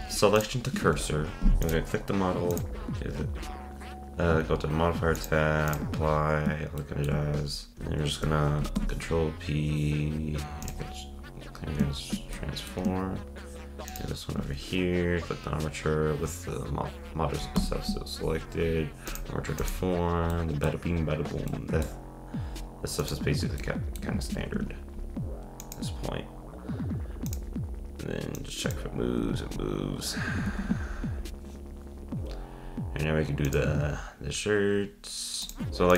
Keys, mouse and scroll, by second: 0.7 ctrl+Tab, 1.3 scroll up 1, 1.4 shift+middle click, 1.6 click, 2.5 click, 5.2-6.8 drag, 6.8-7.2 shift+middle drag, 7.2-8.7 scroll down 5, 8.7 alt+p, 12.3-13.9 middle drag, 13.9 shift+click, 17.5 p, 19.6 click, 20.3-23.0 middle drag, 23.0 click, 23.6-24.2 middle drag, 24.2 ctrl+Tab, 24.6 scroll up 1, 25.6-26.2 drag, 27.3-28.5 drag, 29.2 z, 30.5 ctrl+Tab, 30.8-31.3 scroll down 5, 32.2-34.0 scroll down 3, 35.7 click.